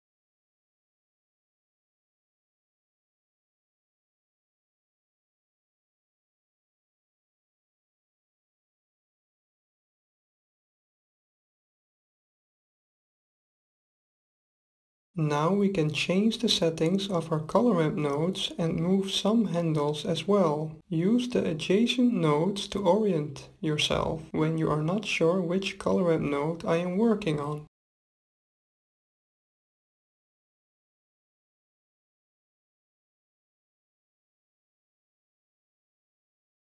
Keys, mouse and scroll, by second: 0.5-2.0 middle drag, 2.0-7.9 drag, 2.0 right click, 3.3-5.1 right drag, 7.5-9.3 middle drag, 9.4 middle click, 11.7-13.7 middle drag, 15.2-17.2 middle drag, 19.2-20.9 middle drag, 23.3-25.2 drag, 27.0-28.9 drag, 29.3-31.3 drag, 31.9-33.7 drag.